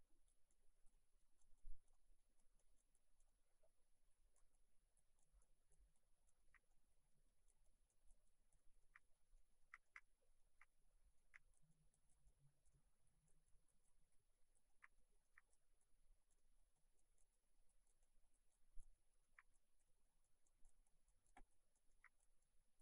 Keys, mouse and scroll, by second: 0.3 click, 1.0 middle click, 1.6 click, 2.0 middle click, 2.4 click, 3.3 middle click, 5.0 click, 6.4 middle click, 6.7 middle click, 7.5 click, 8.6 middle click, 9.1 middle click, 9.9 middle click, 10.4-10.9 scroll down 2, 11.2 shift+middle click, 11.6 click, 12.8 middle click, 13.5 click, 15.0 middle click, 15.5 click, 16.6 middle click, 16.8 click, 19.0 middle click, 19.6 click, 19.9 middle click, 20.3 click, 21.9 middle click, 22.2 click.